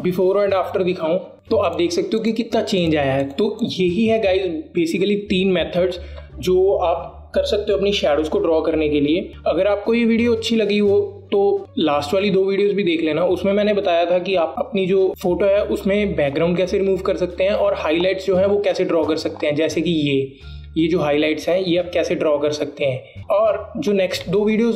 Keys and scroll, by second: 22.9 v.